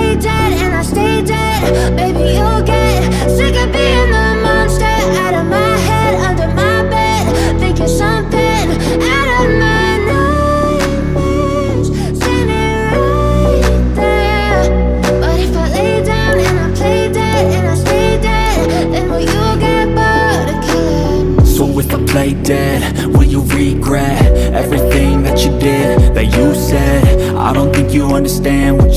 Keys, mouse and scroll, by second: 1.2 click, 1.7 F4, 2.2 click, 2.9 ctrl+o, 3.6-4.0 scroll down 1, 5.1 click, 5.8 click, 6.9 click, 7.9 click, 9.1 ctrl+o, 9.9 scroll down 1, 12.8 click, 13.4 click, 14.4 click, 15.3 F4, 16.0 click, 16.7 ctrl+o, 17.8 scroll down 1, 19.7 scroll down 1, 22.7 click, 24.6 F4, 24.9 click, 26.1 ctrl+o, 26.8 scroll down 1, 28.6-28.9 scroll down 1.